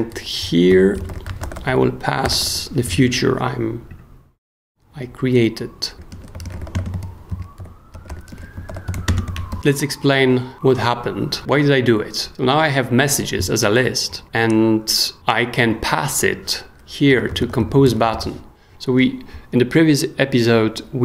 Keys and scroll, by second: 0.4-2.9 typing, 2.9 super+s, 5.7-9.4 typing, 9.5 super+s, 16.8-18.6 typing.